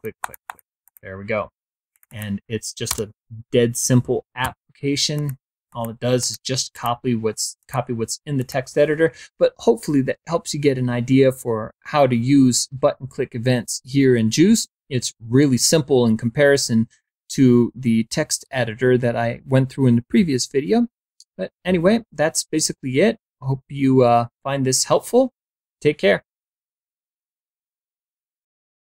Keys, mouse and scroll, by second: 0.7 click, 1.8 click, 2.8 BackSpace, 4.3 t, 5.0 click, 5.5 click, 6.0 click, 6.6 click, 7.4 click, 8.2 click.